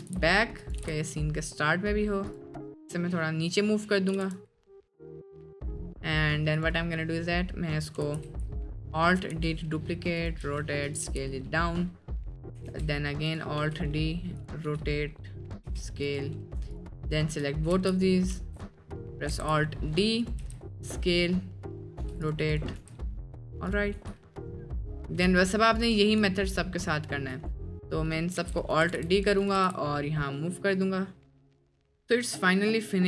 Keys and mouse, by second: 0.0 g, 0.8 g, 2.5-3.3 middle drag, 3.8 middle click, 4.1 r, 6.5 click, 8.1 alt+d, 9.3 r, 10.5 s, 11.0 g, 12.6 alt+d, 13.6 r, 14.6 g, 15.7 s, 17.1 shift+middle drag, 17.7 alt+s, 18.4 ctrl+z, 19.4 alt+d, 20.4 s, 22.0 r, 22.8 r, 24.0 g, 25.4 shift+drag, 25.7 shift+click, 26.5 shift+click, 26.9-27.2 shift+middle drag, 28.1 shift+middle drag, 28.4 alt+d, 28.8 g, 29.5 g, 32.0 middle drag.